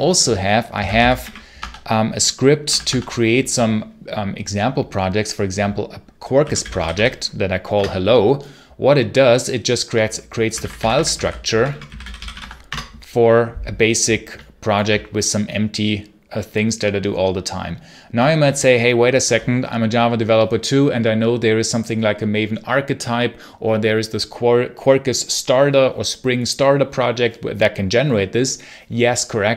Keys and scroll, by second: 0.4-3.1 typing, 6.0-7.3 typing, 7.6 Return, 10.1-12.7 typing.